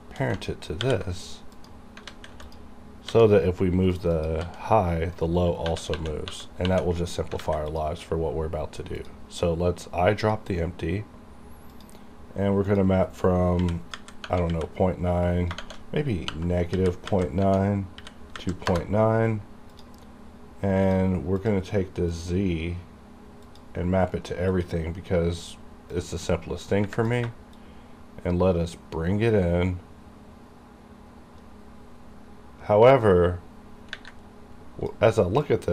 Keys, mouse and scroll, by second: 0.8 ctrl+p, 1.5 click, 2.0 click, 2.1 alt+a, 2.4 click, 2.5 click, 3.1 g, 3.9 right click, 4.2 click, 4.5 g, 5.2 right click, 5.7 typing, 7.3 typing, 7.4 alt+a, 7.7 click, 13.6 KP_Decimal, 14.0 KP_9, 14.5 KP_Decimal, 16.3 KP_Subtract, 16.7 KP_Decimal, 17.0 KP_9, 17.9 KP_Decimal, 18.3 KP_9, 18.7 KP_Enter, 19.8 click, 23.9-24.5 scroll down 1, 24.5-27.5 drag, 27.5 shift+click, 27.6-35.5 shift+drag, 35.5-35.7 shift+drag.